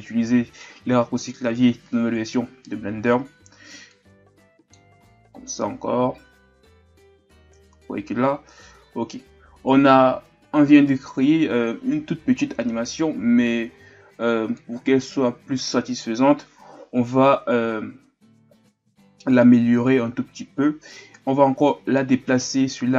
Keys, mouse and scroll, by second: 3.9-17.2 drag, 17.2-17.9 scroll up 4, 21.7-22.9 drag.